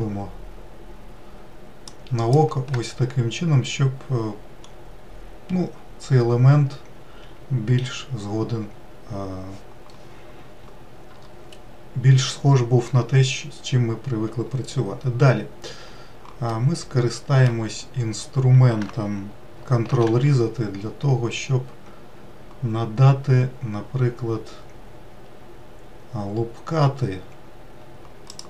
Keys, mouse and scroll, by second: 2.8-4.2 scroll down 1, 4.2-5.2 scroll up 1, 16.0-17.3 middle drag, 17.3-17.7 scroll down 1, 19.5 ctrl+r.